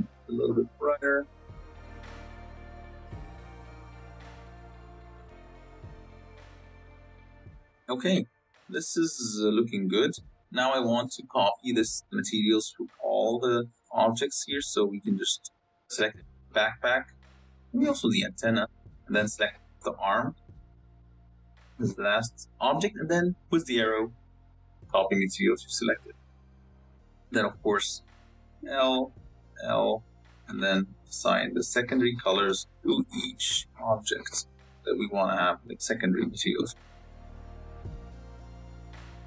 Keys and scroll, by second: 8.5 z, 9.7 z, 27.3 Tab, 27.8 a, 29.1 l, 30.2 l, 32.4 Tab, 33.5 Tab, 34.4 l, 35.1 l, 38.5 Tab.